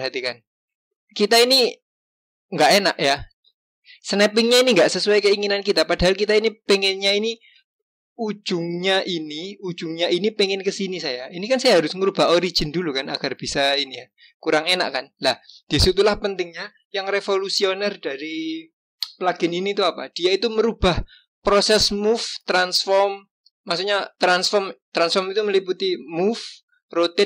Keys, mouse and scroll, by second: 8.4 click, 12.0 click.